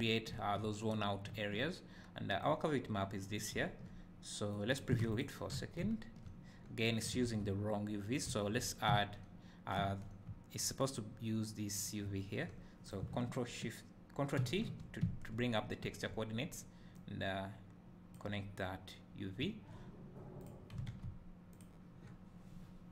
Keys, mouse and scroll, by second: 6.0 `, 12.8 click, 14.5 ctrl+t, 15.1 `, 16.9-20.4 drag, 19.6 `.